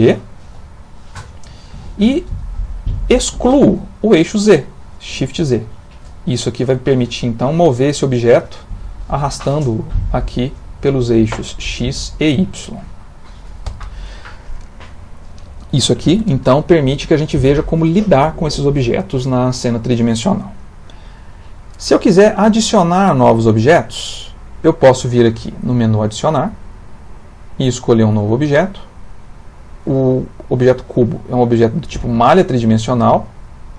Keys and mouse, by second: 0.5 g, 22.2 middle click, 26.9 click, 31.4 click.